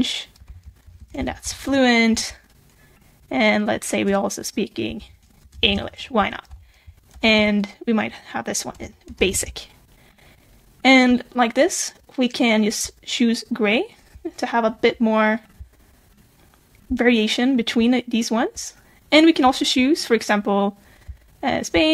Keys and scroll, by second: 0.8 alt+7, 5.0 super+b, 7.1 alt+7.